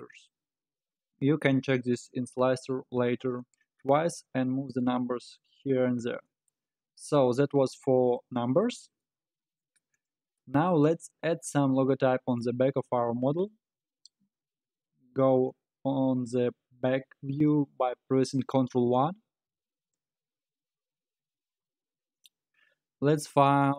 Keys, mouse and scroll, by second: 0.7-1.3 scroll up 2, 1.3-2.8 scroll down 1, 5.7-6.2 scroll up 4, 6.2-7.6 middle drag, 7.6-8.5 scroll up 5, 8.5-9.0 scroll up 3, 9.0-10.0 middle drag, 10.0 click, 10.7 scroll up 2, 11.3-12.9 middle drag, 12.9-15.9 scroll up 2, 18.9 ctrl+KP_1, 20.2-20.6 scroll up 5, 20.6-22.3 scroll down 5.